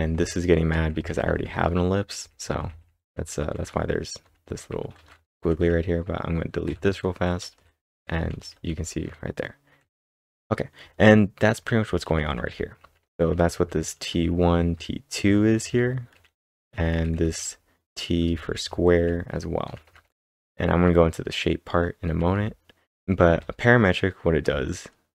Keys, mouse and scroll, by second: 0.0-16.6 typing.